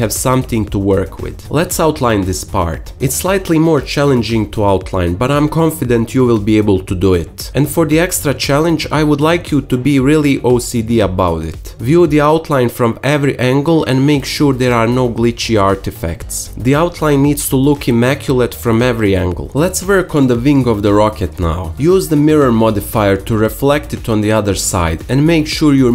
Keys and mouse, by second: 0.4 click, 0.7 Tab, 0.8-1.8 drag, 1.8 Tab, 2.4-3.7 alt+middle drag, 4.3 s, 5.8-7.2 shift+middle drag, 7.3 click, 8.1 g, 8.9-11.4 shift+middle drag, 11.4 2, 11.7 click, 11.9 alt+middle click, 13.8 alt+shift+z, 14.3 g, 14.6 shift+middle click, 16.5 ctrl+r, 18.4 s, 20.8 shift+a, 21.9 Tab, 22.1 s, 23.2-25.9 typing, 23.7 middle click.